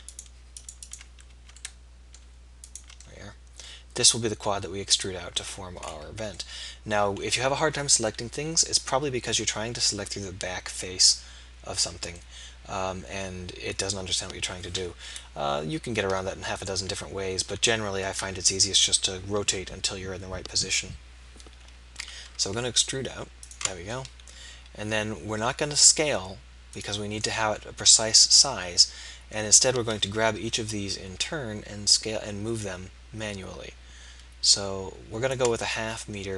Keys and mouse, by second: 3.4-4.4 middle drag, 6.7 middle click, 15.3 KP_1, 16.3 KP_2, 16.6 KP_3, 22.1 e, 30.4 KP_1, 31.9-33.6 drag.